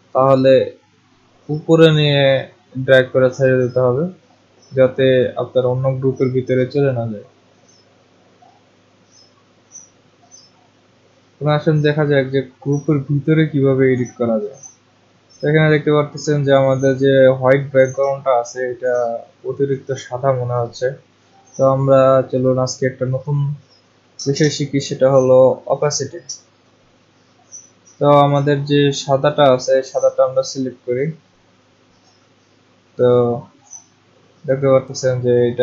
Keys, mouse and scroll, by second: 3.3 click, 5.3 click, 8.7 click, 12.9 click, 30.7 click, 33.1 click.